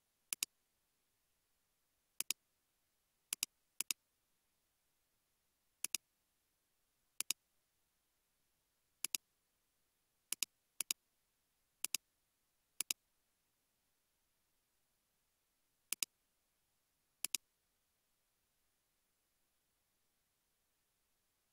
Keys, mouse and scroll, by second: 0.9 typing, 2.7 typing, 4.5 typing, 6.4 typing, 7.6 typing, 9.4 typing, 11.2-12.1 typing, 13.1-14.2 typing.